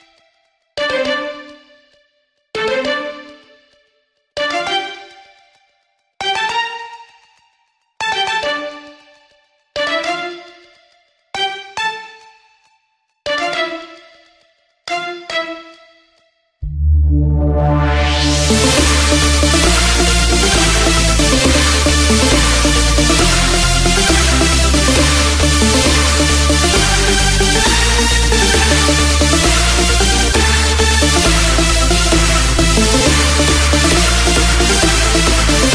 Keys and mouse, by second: 0.7 click, 5.3 click, 10.7 click, 16.7 click, 18.0 KP_0, 21.4 click, 22.0 KP_1, 23.4 click, 26.0 KP_0, 34.7 click.